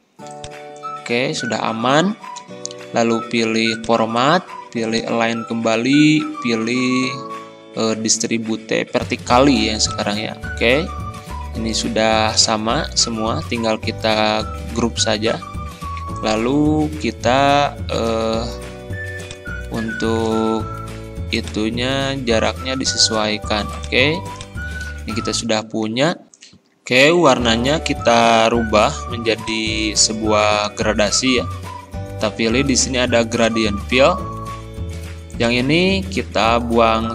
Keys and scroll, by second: 1.5 ctrl+z, 14.9 ctrl+g, 30.2 ctrl+z.